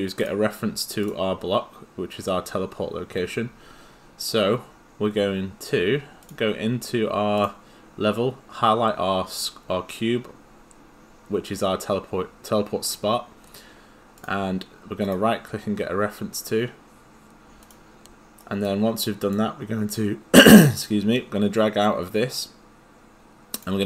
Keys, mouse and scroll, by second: 0.2 click, 6.2 click, 15.0 right click, 17.6 click, 18.4 right click, 19.1 click.